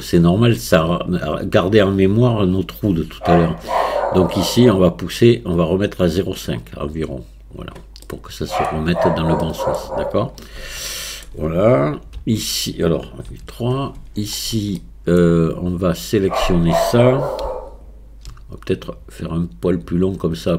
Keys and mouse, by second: 4.6-7.6 drag, 8.1 middle click, 9.4 middle click, 11.0 shift+middle click, 12.2 KP_1, 13.3 KP_3, 14.8 shift+middle click, 18.7-20.5 drag.